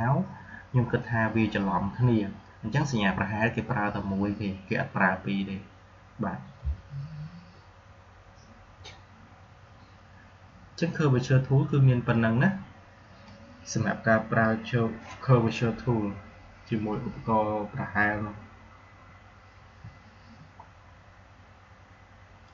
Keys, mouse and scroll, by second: 13.2-16.8 drag, 19.5 Delete, 22.4 click.